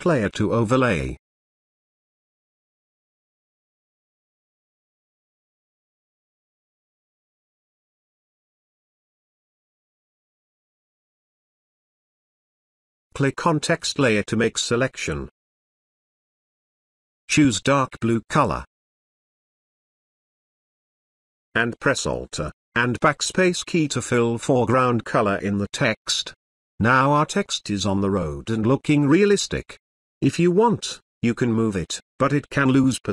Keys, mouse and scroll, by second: 0.8 click, 4.0 click, 4.9 space, 5.1-6.6 ctrl+drag, 6.5 ctrl+space, 13.3 ctrl+space, 14.1-18.8 ctrl+drag, 21.1 alt+BackSpace, 22.2 ctrl+d, 22.7 space, 22.9-24.1 ctrl+drag, 29.0 space, 29.2-31.7 ctrl+drag, 32.1 ctrl+z, 32.6 space, 32.8-33.1 ctrl+click.